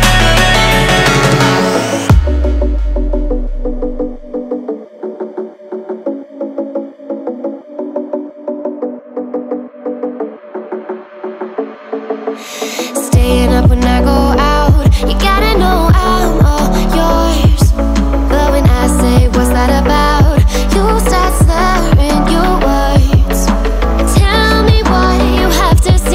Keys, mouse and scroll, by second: 10.8 click, 15.2 click, 22.3 click.